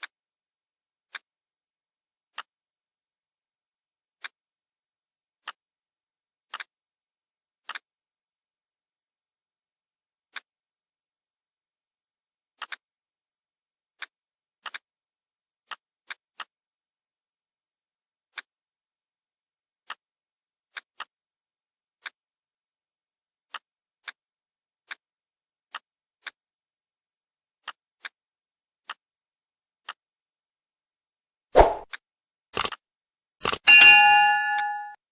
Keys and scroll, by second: 3.9 ctrl+c, 4.4 ctrl+f, 14.1 ctrl+f, 22.9 ctrl+g.